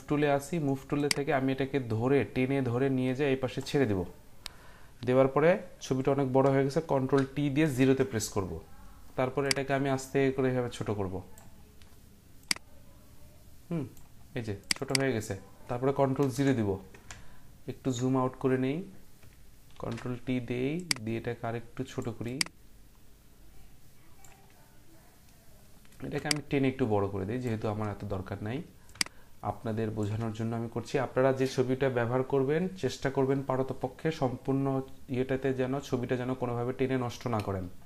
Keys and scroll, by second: 6.9 ctrl+t, 7.7 ctrl+0, 16.2 ctrl+0, 19.7 ctrl+t.